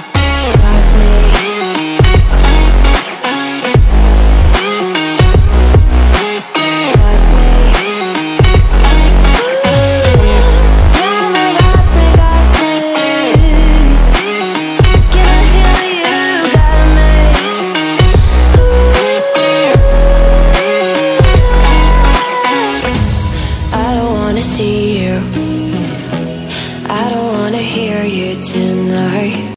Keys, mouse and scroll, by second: 2.1-7.5 drag, 7.5 ctrl+c, 8.9 ctrl+v, 9.5 click, 10.5 scroll down 1, 10.6-11.1 scroll up 1, 11.1 click, 11.9-12.5 scroll up 1, 12.5 click, 13.3 c, 13.8 ctrl+c, 14.1 ctrl+v, 15.0-16.6 drag, 16.6-22.2 drag.